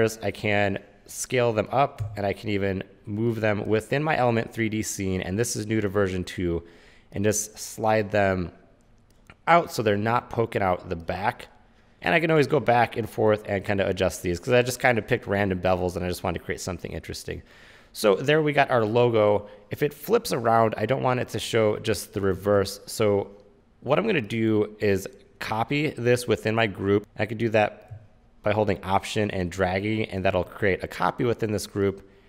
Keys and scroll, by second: 2.1 w, 22.6 super+z, 27.0 super+z.